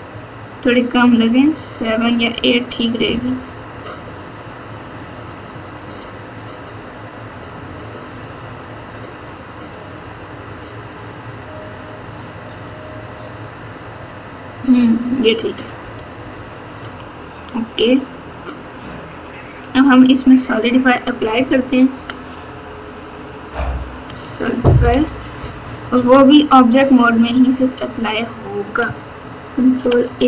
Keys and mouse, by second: 1.6 click, 2.1 click, 3.8-4.8 drag, 5.3 click, 6.8-7.9 drag, 10.6-13.2 drag, 16.8 Tab, 21.9 ctrl+a, 26.1 Tab, 29.7 ctrl+a.